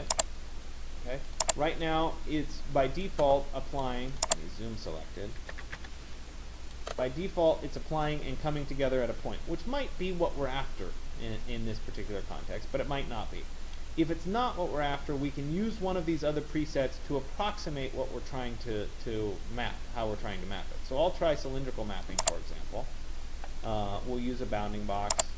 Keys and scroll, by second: 5.2 Return.